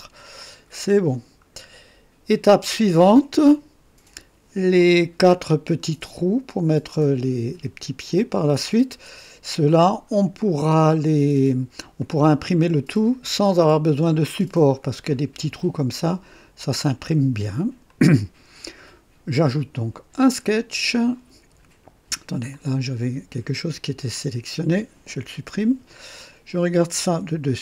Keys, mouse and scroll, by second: 0.4-2.6 drag, 4.8-5.9 drag, 12.0-12.8 drag, 17.9-18.6 drag, 20.1 click, 21.4 scroll down 1, 22.5 click, 24.1 click, 25.2 Delete, 26.2-26.8 drag, 27.2 KP_2.